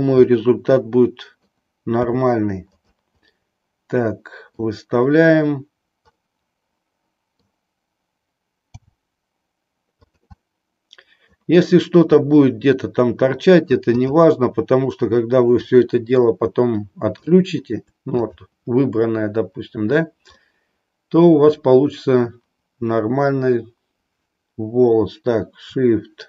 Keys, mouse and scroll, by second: 0.4-1.6 middle drag, 2.0 r, 2.8 click, 3.4-4.8 middle drag, 6.1-7.6 middle drag, 8.6 g, 10.1 click, 10.4-11.5 middle drag, 12.2-13.9 middle drag, 14.0 click, 15.7 middle click, 17.2-17.8 shift+middle drag, 20.4-21.5 middle drag.